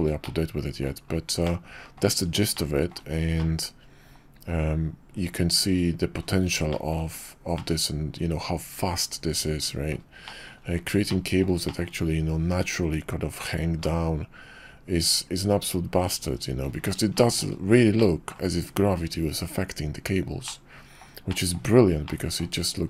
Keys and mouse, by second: 0.2-0.8 middle drag, 1.5-2.0 middle drag, 2.6-2.9 shift+middle drag, 3.4-6.2 middle drag, 6.7 shift+middle drag, 7.6-9.9 middle drag, 10.2 shift+middle drag, 11.1 middle click, 11.7 shift+middle click, 13.8-16.6 middle drag, 17.1 shift+middle drag, 18.0-18.3 middle drag, 20.5 middle click, 21.3 shift+middle drag, 22.1 middle click.